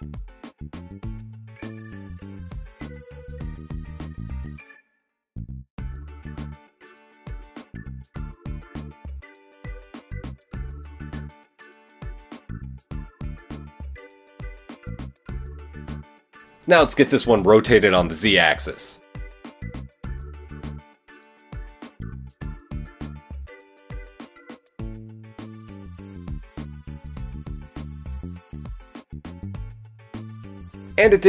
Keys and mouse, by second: 0.5 g, 1.1 click, 1.2-3.3 middle drag, 2.4 g, 4.4 click, 4.6 middle click, 5.0 g, 5.9 Tab, 5.9-8.0 middle drag, 8.0 click, 8.3-13.9 middle drag, 11.4 KP_1, 11.8 KP_3, 13.7 KP_7, 16.9 r, 19.7-26.8 middle drag, 23.9 g, 26.8-30.1 drag, 30.5 Tab, 30.5 a, 30.6 a, 31.0 a.